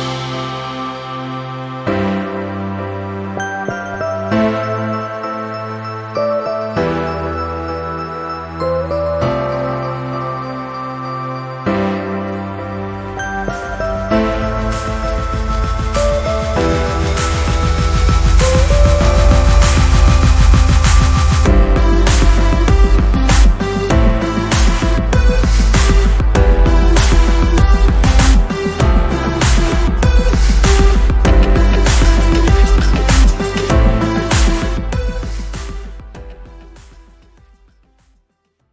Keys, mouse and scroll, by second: 1.3 shift+click, 3.1 ctrl+scroll down 1, 4.5-6.9 drag, 8.2-10.5 drag, 10.9-12.1 drag, 12.3 ctrl+scroll down 1, 12.9-13.3 ctrl+scroll up 1, 13.3-14.8 drag, 15.3 i, 16.4 click, 18.9 z, 22.5 click, 23.3 c, 23.8 v, 24.1 click, 24.5 z, 25.4-26.7 alt+drag, 28.1 ctrl+s, 28.8-33.4 typing, 35.1 click, 38.2 click.